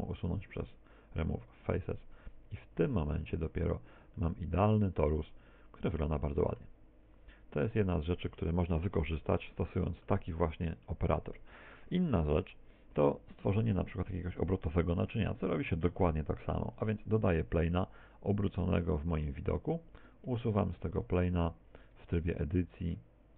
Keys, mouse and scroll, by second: 2.7 z, 3.0 scroll down 1, 3.2 Tab, 3.5 z, 4.2 middle click, 7.1-8.4 scroll down 1, 8.4 x, 8.9 x, 9.4 middle click, 10.5 middle click, 10.8 middle click, 12.2 KP_1, 13.4 shift+a, 18.5 click, 19.6 Tab, 20.0 right click, 21.4 Tab, 22.0 Tab.